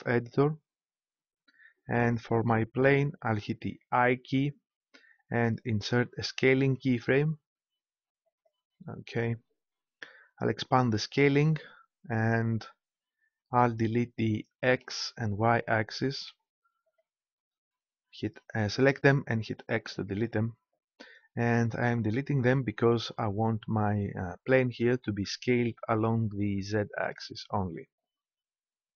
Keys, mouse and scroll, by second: 4.0 i, 11.3-13.1 drag, 14.2-16.0 drag, 16.2 x, 16.9-18.7 drag, 19.8 x.